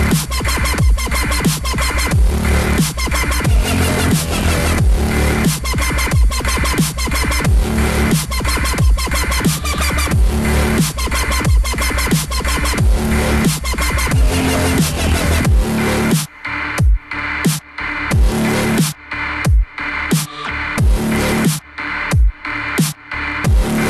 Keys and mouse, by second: 0.8 a, 3.8 q, 7.5 q, 10.8 click, 15.8 F9, 19.7 click, 21.6 a.